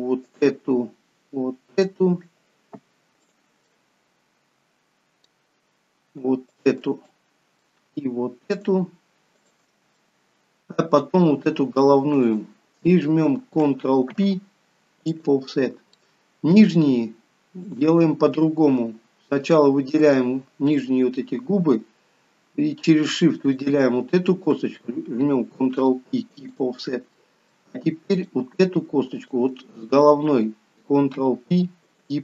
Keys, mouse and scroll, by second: 0.2 shift+click, 3.2 shift+click, 3.6 middle click, 6.4 shift+click, 7.0 middle click, 8.5 shift+click, 9.5 shift+click, 9.9 middle click, 12.1 shift+click, 14.1 ctrl+p, 15.9 middle click, 17.5 click, 19.3 shift+click, 20.8 middle click, 23.3 shift+click, 25.5 ctrl+p, 27.0 middle click, 28.1 click, 29.1 shift+click, 31.1 ctrl+p.